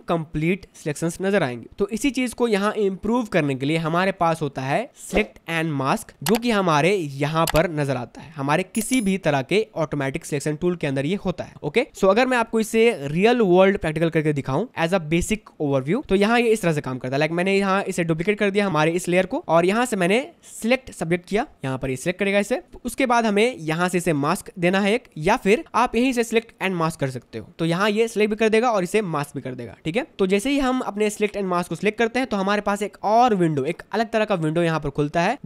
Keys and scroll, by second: 1.7 space, 14.5 Delete, 16.8 ctrl+j.